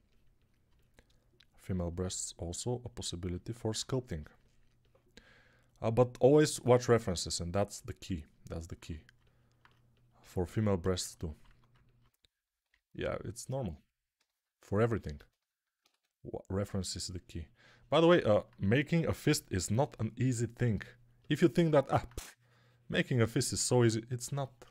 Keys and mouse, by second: 11.3 1, 15.8 1, 16.5 3, 17.0-21.3 drag, 17.0-21.3 middle drag, 17.0-21.3 right drag, 23.4 1.